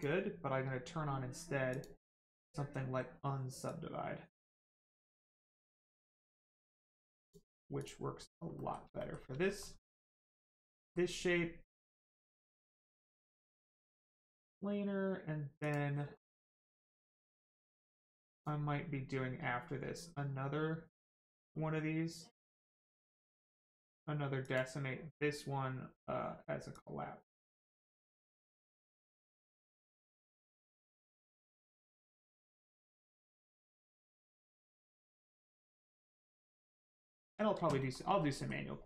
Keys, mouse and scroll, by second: 3.7 click, 8.2 scroll down 1, 8.6 middle click, 9.0 shift+middle click, 9.4 middle click, 9.5 middle click, 9.8 shift+middle click, 10.4 middle click, 10.8 shift+middle click, 15.6 click, 16.2 shift+middle click, 16.5-16.9 scroll up 1, 17.8 click, 24.4 click, 26.7 click, 36.2 middle click, 36.8 scroll down 1, 37.1 shift+middle click, 37.8 shift+middle click, 38.2 middle click, 38.2 middle click.